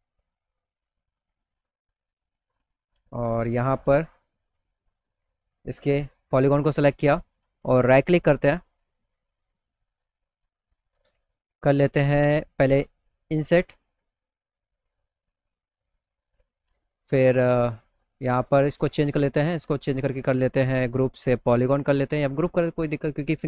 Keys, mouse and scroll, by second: 0.0 click, 1.5 click, 2.3 click, 2.9 click, 7.3 click, 9.2 click, 12.8 click, 14.2 middle click, 14.6 middle click, 17.2 click, 18.2 click, 22.0 click.